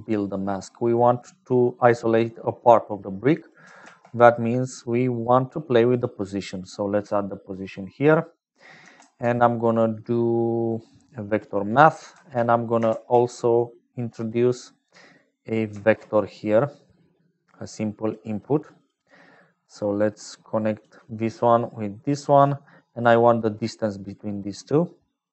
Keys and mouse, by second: 0.0-25.3 typing, 3.3 click, 7.2 click, 19.7-20.7 drag, 21.4-22.4 drag, 22.9-25.3 drag.